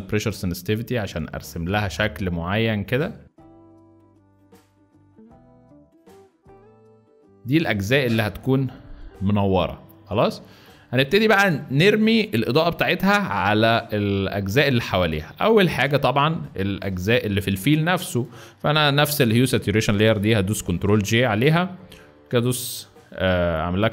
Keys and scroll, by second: 4.5 space, 7.1 z, 7.3 space, 7.6 z, 10.0 space, 10.6 z, 15.2 space, 15.9 z, 20.5 ctrl+j.